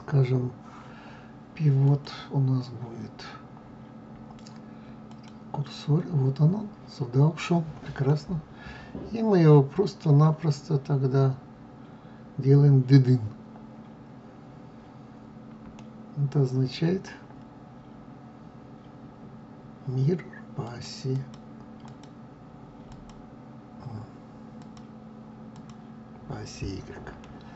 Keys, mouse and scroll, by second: 1.6-4.6 drag, 7.8-14.5 middle drag, 14.5 scroll down 2, 15.1-15.5 scroll up 1, 15.5-20.4 middle drag, 20.4 click, 20.8 click, 21.5 click, 22.6 click, 24.3 click, 25.2 click, 26.9-27.5 middle drag.